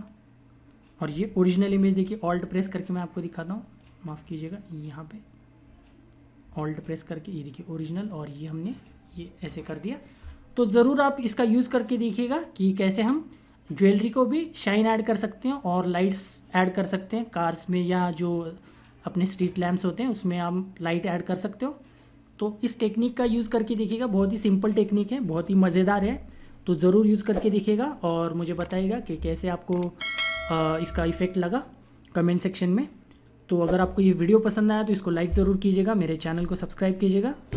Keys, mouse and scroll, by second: 1.0 click.